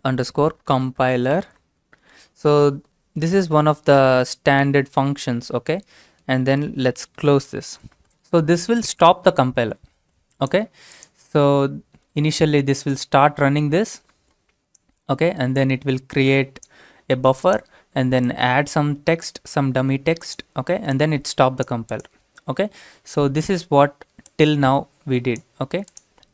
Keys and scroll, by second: 0.0-2.2 typing, 3.2 typing, 4.6 typing, 6.4-7.2 typing.